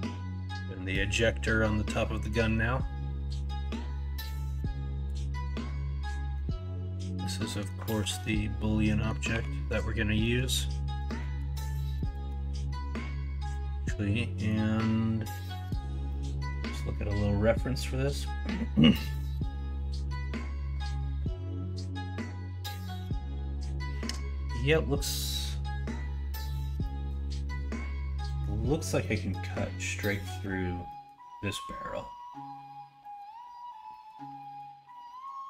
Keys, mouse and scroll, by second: 6.3-7.7 middle drag, 6.3-6.7 scroll up 1, 7.2 scroll down 1, 7.8 alt+z, 8.2 scroll up 1, 8.4 middle click, 9.0 scroll down 1, 9.3 2, 10.2 middle click, 12.2 Tab, 13.5-14.4 middle drag, 19.4-20.1 middle drag.